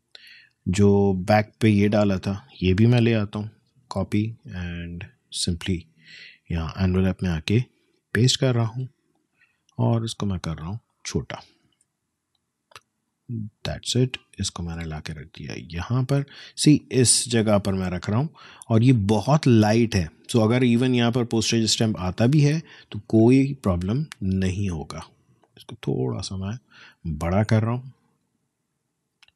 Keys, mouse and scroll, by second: 0.2 click, 0.6 space, 0.8 click, 1.1 space, 1.9 click, 5.5 click, 7.4 ctrl+v, 8.6 space, 8.8 click, 10.2-14.8 drag, 15.3 space, 15.5 click, 15.8 space, 16.8-18.4 drag, 18.4 click, 23.2 click, 24.7-29.3 shift+drag.